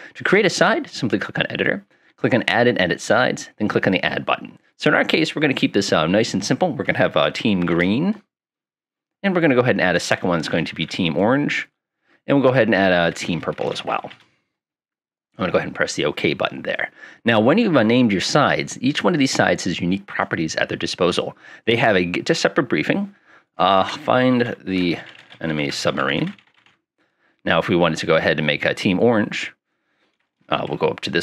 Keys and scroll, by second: 3.9 Tab, 6.8-8.1 typing, 9.5 Tab, 10.0-12.2 typing, 12.5 Tab, 13.3-14.6 typing, 24.2-27.2 typing, 30.7 Escape.